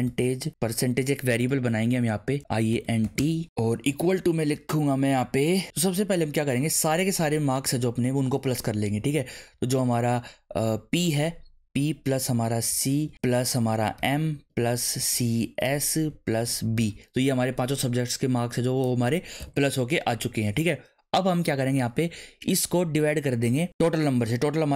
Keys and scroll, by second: 0.0-4.0 typing, 10.9 p, 12.1-16.7 typing, 19.4 shift+9, 19.8 Right, 23.1 /.